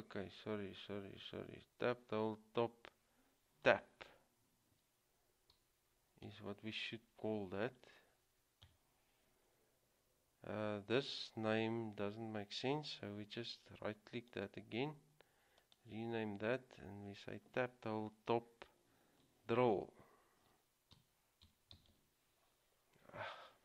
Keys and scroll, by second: 4.8-5.7 typing, 8.8 typing, 20.5-22.6 typing.